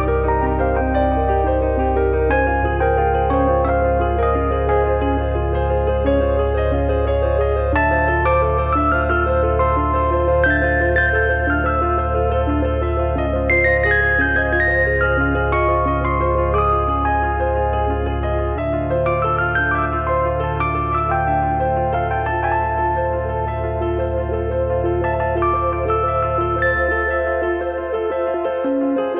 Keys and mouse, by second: 0.2 click, 0.6 click, 5.5 click, 14.0 middle click, 17.2 click, 18.3 click, 22.8 click.